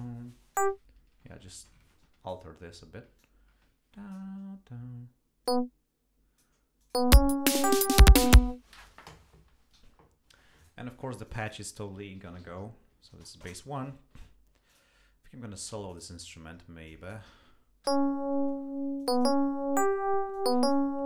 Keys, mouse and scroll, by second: 0.5-2.5 drag, 3.2-4.3 drag, 5.5-6.6 drag, 6.8 click, 7.0 space, 8.6 space, 9.8 g, 10.6 click, 11.3 click, 11.9-13.2 typing, 13.4 shift+Return, 14.7 click, 15.9 click, 16.9 click, 17.9 l, 19.0 click, 20.3 click.